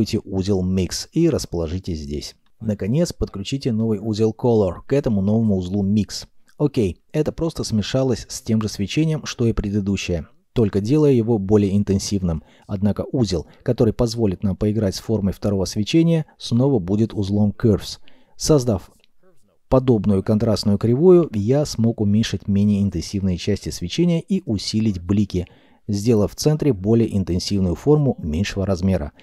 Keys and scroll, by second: 5.9 s, 6.7 g, 14.5 c, 14.7 u.